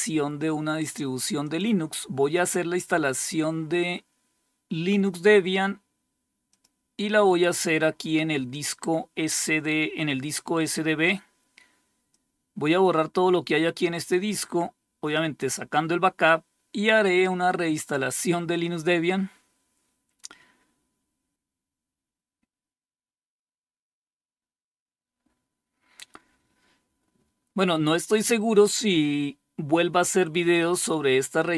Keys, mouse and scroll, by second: 0.9 click, 2.5 click, 6.0 click, 11.5-14.1 drag.